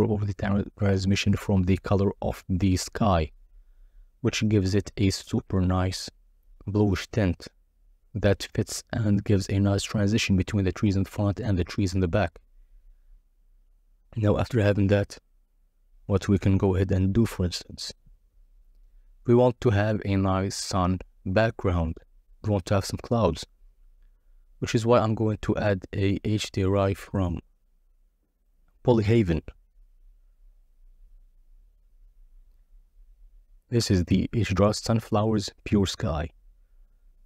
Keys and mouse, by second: 2.6-4.7 drag, 5.7-7.0 drag, 10.1 click, 14.7 right click, 15.6-16.3 drag, 16.8 click, 17.2 shift+a, 21.9 click, 35.7-37.0 drag.